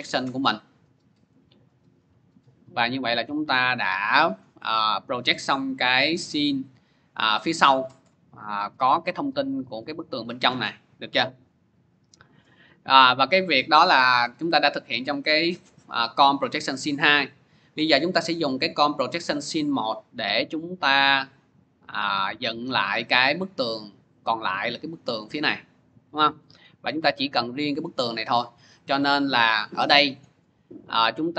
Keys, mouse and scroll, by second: 1.5 click, 3.1 click, 5.8 click, 14.0-15.1 drag, 17.3 click, 18.5 click, 20.2 click, 20.4 click, 22.5 click, 26.4-27.6 drag, 30.0 click.